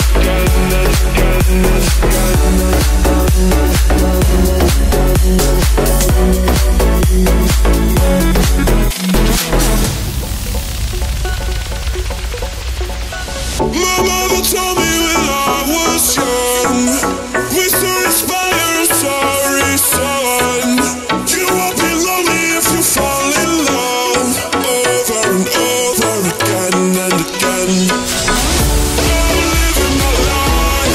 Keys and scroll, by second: 7.2 ].